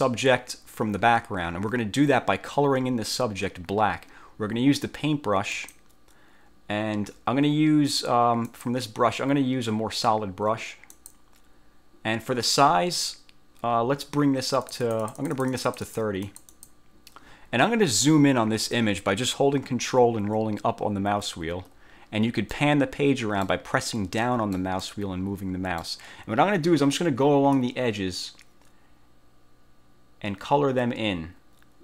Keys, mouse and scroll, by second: 5.7 click, 8.6 click, 11.1 click, 14.7 click, 16.4 click, 20.5-21.5 ctrl+scroll up 4, 22.6 click, 22.7 middle click, 22.8 click, 23.3 middle click, 23.4 click, 24.0 middle click, 24.2 click, 24.9 middle click, 25.1 click, 25.5 middle click, 27.7-31.8 drag.